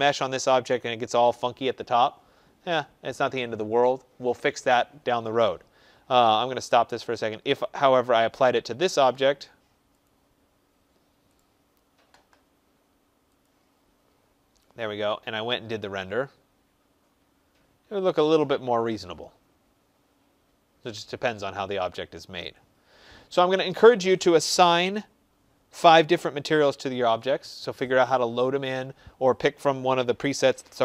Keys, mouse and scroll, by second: 6.3 click, 7.8 click, 9.9 click, 11.2 right click, 13.3 click, 15.7 click.